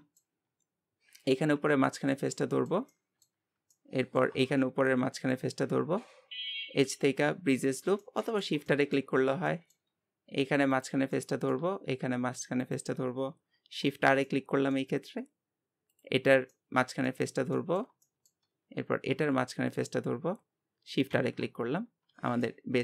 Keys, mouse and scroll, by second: 1.2 click, 1.6 scroll down 2, 1.8-3.5 shift+middle drag, 3.5 scroll up 2, 3.7-5.2 middle drag, 5.2-8.0 shift+drag, 8.0-9.2 middle drag, 9.2 scroll up 1, 9.5-10.7 shift+middle drag, 10.7 click, 11.1-12.6 middle drag, 12.6-13.9 shift+drag, 13.9 shift+r, 14.3-15.9 middle drag, 15.9 click, 16.2 scroll down 1, 16.5-18.5 middle drag, 18.5-19.8 scroll up 2, 19.8-21.1 shift+drag, 21.1 shift+r, 21.5 scroll down 2, 22.1 Tab, 22.4-22.8 middle drag.